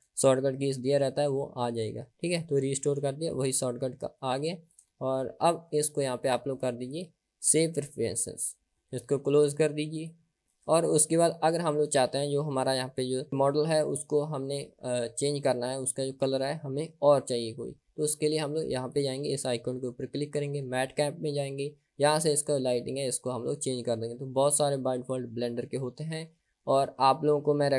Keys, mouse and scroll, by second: 18.9-27.7 drag.